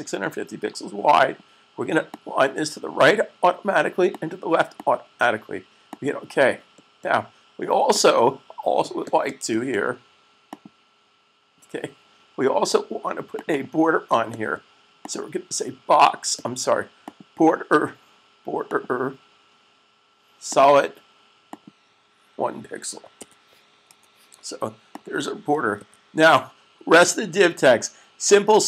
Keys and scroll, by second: 23.5 1, 26.2 s.